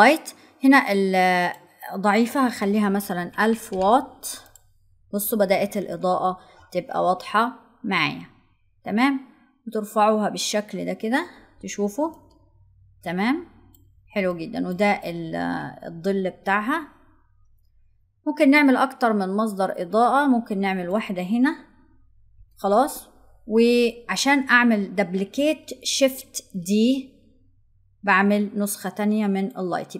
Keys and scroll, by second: 25.7 shift+d.